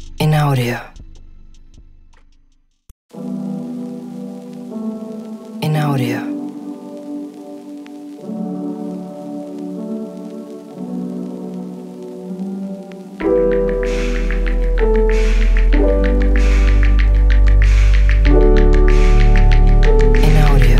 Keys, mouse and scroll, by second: 0.6 click, 1.3-1.9 drag, 2.3-2.8 drag, 3.1-3.7 drag, 5.0 click, 5.3-7.0 drag, 7.9 Tab, 9.7-11.4 drag, 13.1 click, 13.8 click, 16.1 click, 16.5 shift+click, 17.7 shift+click.